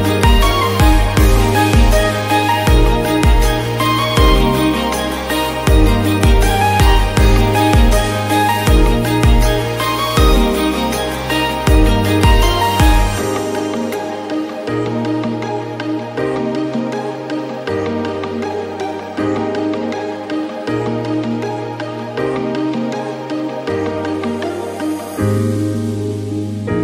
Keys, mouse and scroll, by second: 1.0-1.4 scroll down 6, 2.0 click, 2.4-2.7 scroll up 2, 2.7 shift+middle click, 3.2-3.8 scroll down 1, 3.8-8.1 drag, 8.1-8.9 scroll up 14, 8.9 drag, 9.8 shift+click, 10.6 ctrl+p, 11.5 scroll down 8, 11.8 drag, 12.2 click, 12.5-12.8 scroll down 3, 12.8 g, 14.6-14.9 scroll down 3, 14.9 KP_1, 16.0 shift+middle drag, 16.2-16.6 scroll up 5, 16.6 shift+middle click, 16.9-17.4 scroll down 4, 17.4 g, 22.0 click, 22.2 shift+a, 23.5-24.9 drag, 25.1 click, 25.4-26.0 middle drag, 26.0 KP_7, 26.2-26.6 scroll down 2, 26.6 click.